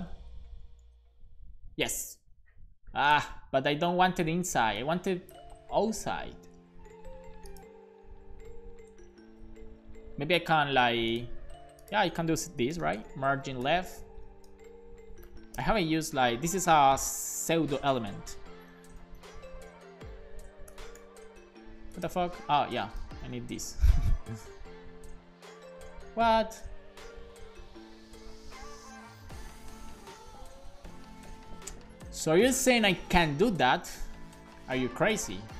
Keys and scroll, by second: 0.3 Return, 0.8 super+s, 12.6-15.9 typing, 18.9-20.5 typing, 20.7 alt+shift+f, 21.0 super+s, 23.0 ;, 23.2 super+s, 23.5 Down, 23.8 Right, 24.1 BackSpace, 24.3 super+s, 32.1 Up, 32.4 super+Right, 32.7 super+Return, 34.5 s.